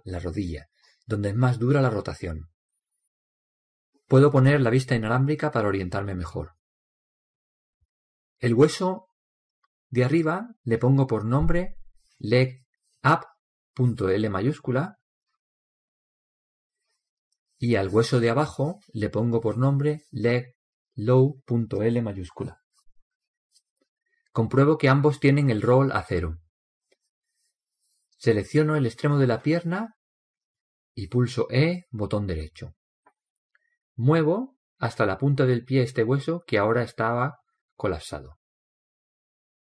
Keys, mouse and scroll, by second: 7.1 z, 9.2 alt+z, 10.6 right click, 11.4 click, 11.4-12.5 middle drag, 12.2 right click, 18.2-20.2 right drag, 19.0 click, 25.5-28.5 right drag, 29.9-31.9 right drag, 32.8 e, 34.8 click, 38.3 click, 38.6-39.6 drag.